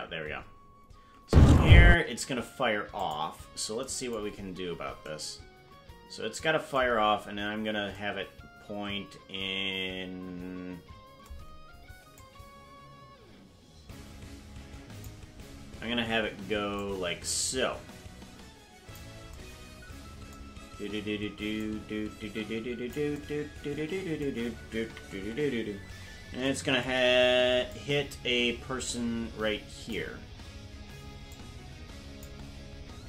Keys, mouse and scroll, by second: 1.2 space, 1.9 space, 3.0 click, 4.3-4.9 scroll down 8, 6.9 scroll down 1, 7.5-7.9 scroll down 2, 12.2-15.1 drag, 16.7-19.0 drag, 21.6-22.9 drag, 25.1 KP_Decimal, 25.7-26.3 scroll down 10, 27.6-29.9 drag, 31.3 click.